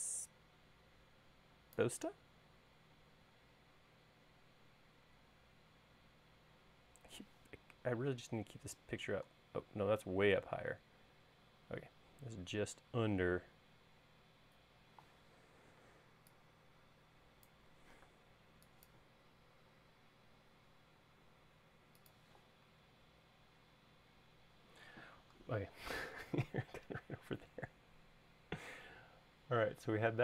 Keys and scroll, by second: 18.0 m.